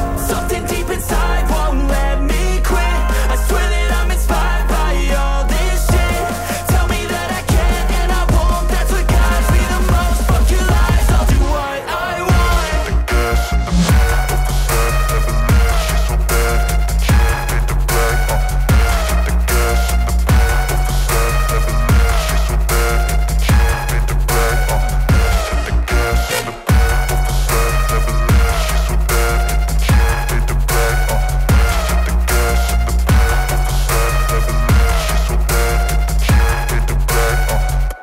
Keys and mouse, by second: 2.2 middle click, 3.2 middle click, 4.3 middle drag, 4.7 click, 5.2 KP_0, 5.5 middle click, 6.1 KP_1, 6.5 shift+middle click, 6.9 click, 7.2 click, 7.9 click, 9.9 click, 10.2 click, 10.6 click, 11.1 click, 11.6 click, 12.5-13.2 middle drag, 13.4 click, 14.3 click, 14.7 shift+middle click, 15.6 click, 16.9 click, 19.3-21.8 middle drag, 22.5-23.5 drag, 23.7-24.1 middle drag, 24.3 click, 25.3 click, 25.5 shift+middle click, 25.9 click, 35.1 shift+middle click, 35.4 shift+middle drag, 35.8-37.0 drag, 37.0-37.7 middle drag, 37.9 shift+middle click.